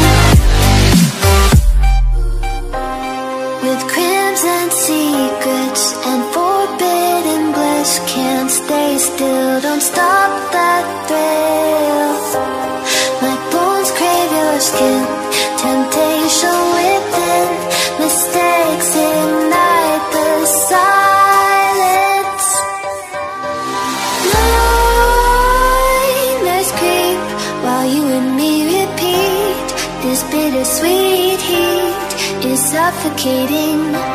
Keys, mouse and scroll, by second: 0.7 Return, 0.9 ctrl+s, 1.4 click, 2.4 click, 3.0 Delete, 3.3 click, 4.1 click, 4.7 Return, 4.8 click, 5.8 s, 6.2 click, 7.6 click, 8.7 s, 9.1 click, 10.2 Delete, 10.4 click, 11.0 ctrl+s, 11.5 click, 12.3 Delete, 12.4 click, 13.2 alt+click, 13.9 Return, 14.3 ctrl+s, 14.8 click, 16.7 ctrl+s, 17.1 click, 18.2 click, 18.6 Delete, 19.2 click, 19.7 ctrl+s, 20.3 click, 21.7 click, 23.2 ctrl+shift+s, 24.9 click, 31.2 s.